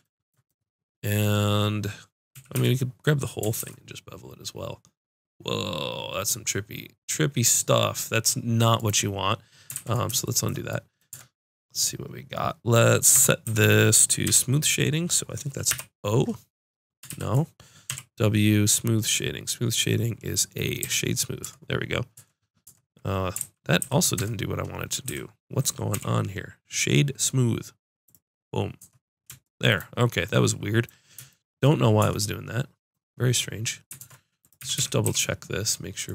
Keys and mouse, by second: 2.3 a, 2.5 a, 3.6 ctrl+b, 7.9 click, 9.7 ctrl+z, 11.1 Tab, 13.2 Tab, 13.4 a, 14.3 w, 17.1 ctrl+z, 17.9 w, 21.4 Tab, 22.1 Tab, 22.6 Tab, 23.4 ctrl+z, 23.8 ctrl+z, 24.2 Tab, 25.1 a, 25.9 w, 27.3 ctrl+z, 28.8 Tab, 32.0 Tab, 34.0 ctrl+Tab, 34.6 a, 34.8 a, 35.0 w.